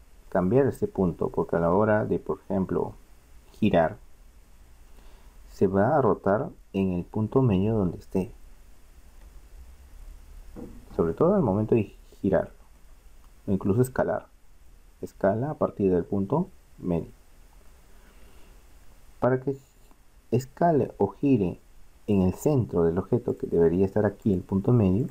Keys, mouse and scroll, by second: 4.8 r, 10.6-13.6 middle drag, 13.6 s, 19.5-21.4 middle drag, 23.3 click.